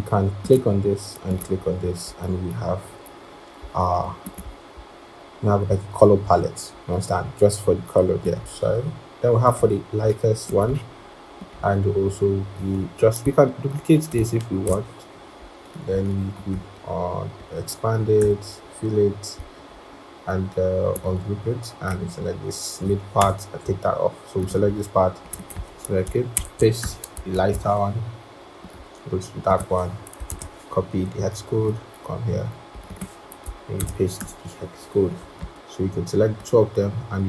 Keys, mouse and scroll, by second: 10.5 typing, 13.1 typing, 13.9 alt+click, 18.1 Return, 19.3 right click, 23.1 BackSpace, 25.2 double click, 26.0 double click, 26.6 typing, 27.0 Return, 27.0 double click, 27.2 alt+Tab, 30.2 alt+Tab, 32.8 double click, 34.1 Return.